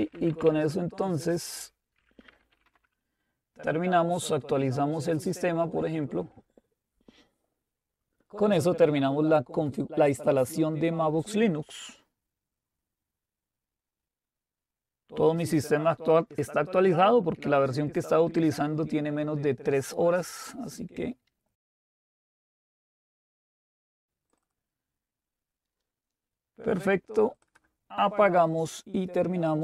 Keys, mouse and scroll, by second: 0.0-3.0 typing, 5.2 click, 18.4 click, 22.0-24.0 drag, 24.3 click, 27.4 click.